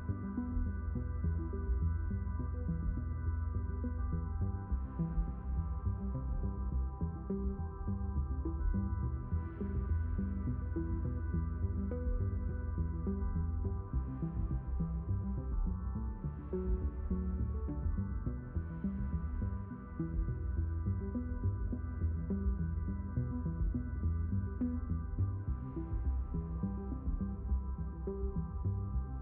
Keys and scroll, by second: 0.7 Delete, 9.9 Delete, 17.1 q.